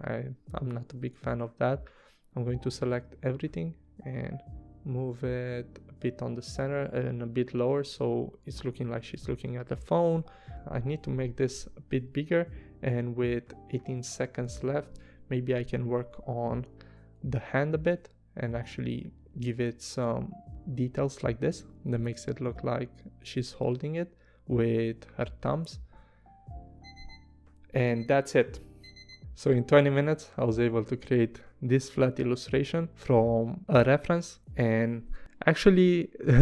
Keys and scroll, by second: 17.1 p, 26.8 v.